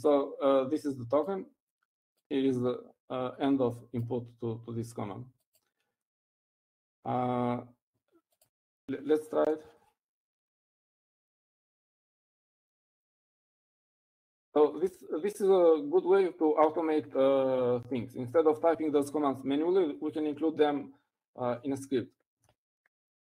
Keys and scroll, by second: 11.4-12.6 typing, 13.8-16.7 typing.